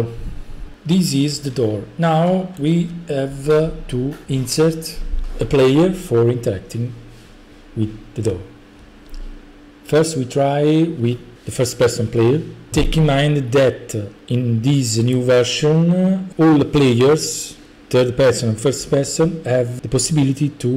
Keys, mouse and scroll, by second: 0.7-2.8 typing, 2.6-3.7 right drag, 10.1-11.2 drag.